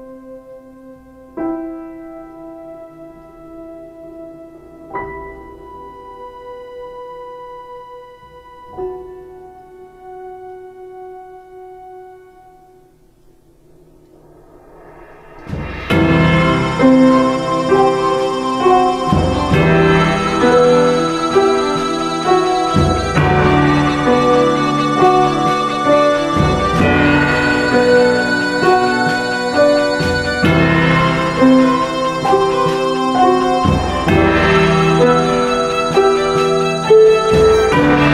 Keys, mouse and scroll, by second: 26.1 ctrl+z, 36.1 ctrl+space, 37.3 ctrl+space.